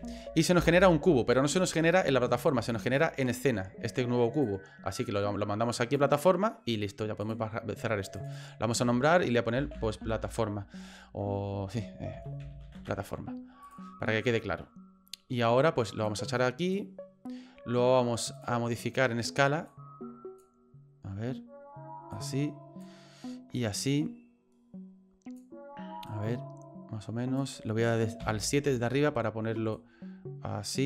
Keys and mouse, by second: 2.9 click, 4.5-6.0 drag, 8.1 click, 8.3-13.7 drag, 16.0 click, 18.4-20.4 drag, 22.1 click, 23.6-25.4 drag, 26.0-27.4 drag, 28.2 KP_7, 29.7-30.8 drag.